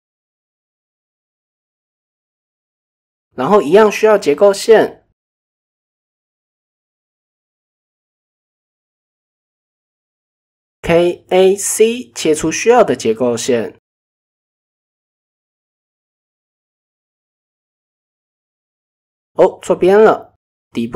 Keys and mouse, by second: 0.8 g, 3.1 middle click, 3.9 ctrl+z, 5.1 KP_1, 5.5 KP_3, 5.9 ctrl+KP_1, 6.6 shift+middle click, 8.8 click, 11.7 k, 16.0 click, 16.5 middle click, 18.8 g.